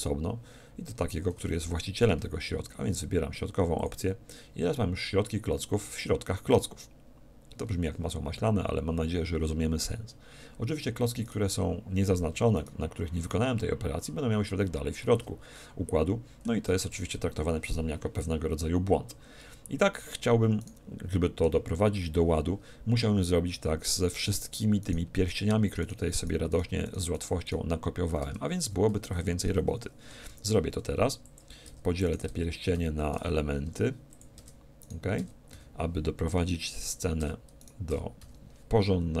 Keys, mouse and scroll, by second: 11.2-15.0 right drag, 15.5-17.3 middle drag, 16.6 a, 16.9 z, 19.4 middle click, 20.6-22.3 right drag, 22.3 middle click, 24.8-29.4 right drag, 28.2 Tab, 28.6 a, 28.8 a, 29.2 a, 30.2 p, 31.6 Tab, 32.0-33.8 right drag, 32.2 Tab, 32.8 a, 33.6 p, 34.4 Tab, 34.8-36.6 right drag, 35.2 Tab, 35.5 a, 36.2 p, 37.2 Tab, 37.6-39.2 right drag, 37.9 Tab, 38.2 a.